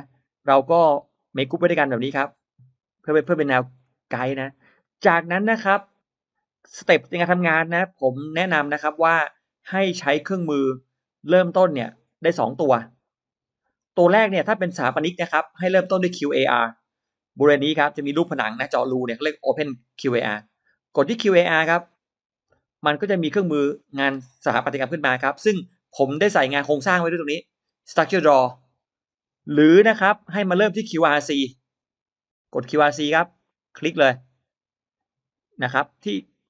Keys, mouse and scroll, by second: 0.0 middle click, 1.0 click, 1.2 click, 2.8 drag, 3.1-3.5 drag, 3.5 middle click, 3.5-4.2 scroll up 2, 4.4-4.7 scroll down 1, 4.7 middle click, 4.7-5.5 scroll up 2, 7.2-10.4 drag, 15.1 scroll down 1, 21.8 click, 23.2-25.1 drag, 33.3 click, 35.5 click, 36.3 click.